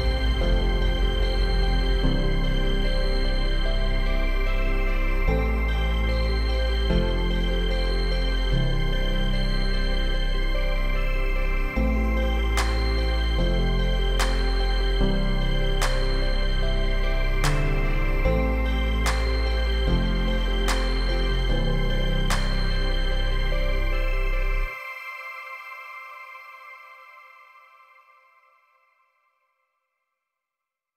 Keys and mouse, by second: 0.0-0.7 typing, 0.2 ctrl+z, 0.8 click, 2.8 ctrl+z, 2.8 ], 2.8 ], 2.9 ], 3.0 ], 3.9 click, 4.1-8.7 typing, 4.3 click, 4.7 ctrl+z, 4.8 ctrl+z, 5.5-5.9 drag, 6.3 click, 7.8 click, 8.1 ctrl+z, 8.2 click, 8.7 ctrl+z, 9.0 click, 9.8 click, 10.9 ], 11.1 ctrl+z, 12.1 ctrl+z, 12.3 middle click, 12.8 middle click, 13.6 middle click, 14.2 middle click, 14.9 middle click, 16.5 click, 17.3 click, 18.1 shift+click, 18.2 shift+middle click, 19.3 click, 20.2 click, 20.5-22.0 drag, 22.2 ctrl+z, 22.8-23.3 drag, 23.5 click, 23.7 ctrl+z, 24.1-24.5 drag, 24.7 click, 25.3 ctrl+z, 25.3-25.6 [, 25.6 click, 26.1 ctrl+z, 26.1-26.6 ], 26.6 click, 27.7 ctrl+z, 28.2 click, 28.6 click, 28.6 ], 29.3 ctrl+z, 29.3 [, 29.8-30.9 drag, 29.8 [.